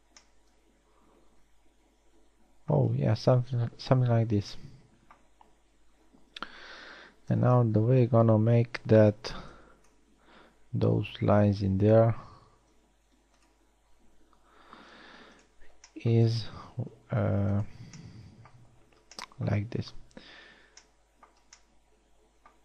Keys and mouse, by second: 0.4 a, 1.0-1.8 middle drag, 3.7 middle click, 5.7-7.4 middle drag, 7.4 KP_1, 8.4 z, 10.2 b, 12.1 b, 13.3 x, 15.5 ctrl+Tab, 17.5 ctrl+Tab, 19.3 z, 20.1 middle click.